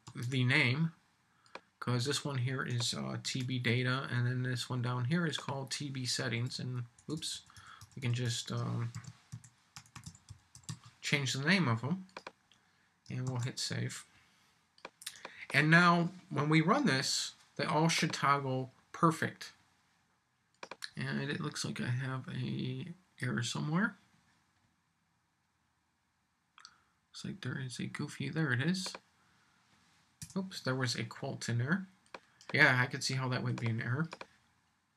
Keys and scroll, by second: 0.0 super+c, 3.2 super+v, 8.9 shift+s, 13.2 super+s.